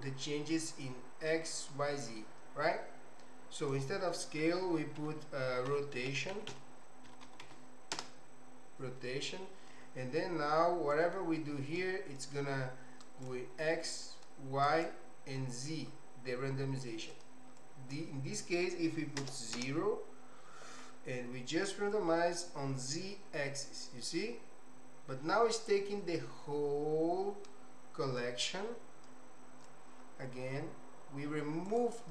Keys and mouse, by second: 3.7-8.9 drag, 10.9-13.3 drag, 14.0 click, 16.7 click, 17.6-20.8 drag, 21.9-29.8 drag, 31.7 click.